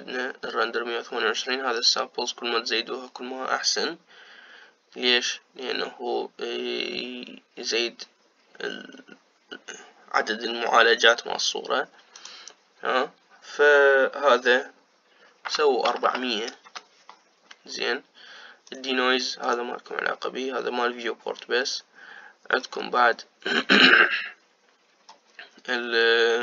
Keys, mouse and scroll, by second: 13.0-16.9 drag, 16.9 KP_0, 19.5-23.3 drag, 23.3-26.1 scroll down 4, 26.1 scroll down 1.